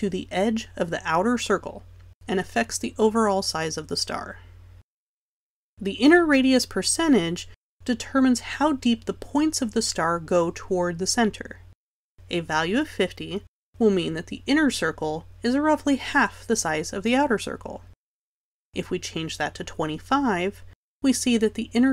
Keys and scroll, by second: 17.9 5.